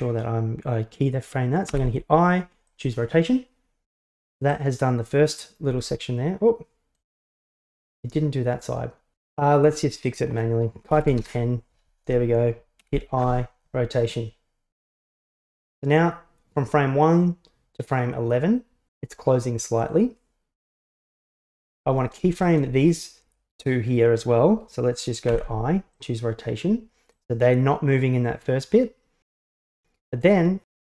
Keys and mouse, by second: 1.8 i, 4.6-7.0 drag, 10.3-12.1 drag, 12.8 i, 15.7-20.0 drag, 21.6-22.2 right drag, 22.4 shift+right click, 25.3 i, 27.2-30.2 drag.